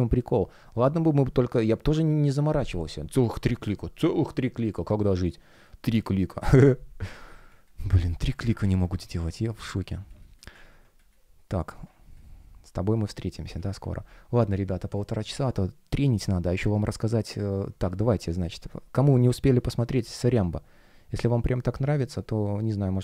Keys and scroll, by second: 5.2 space, 8.5 super+w, 10.0 space, 10.8 space, 13.7 super+w.